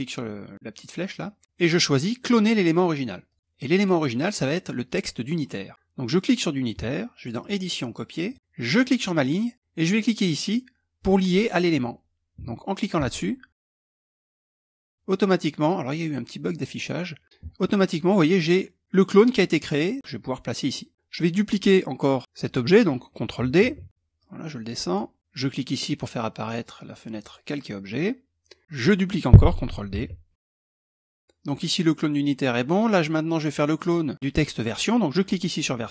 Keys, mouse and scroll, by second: 2.8-3.9 drag, 6.9 click, 7.8 click, 8.2 middle click, 8.3 click, 12.5 click, 13.5 click, 13.9 click, 17.3-20.5 drag, 23.3 ctrl+d, 23.7 click, 26.7 click, 28.6 click, 29.5 ctrl+d, 29.9 click, 31.1 click, 33.3 click, 34.7 click.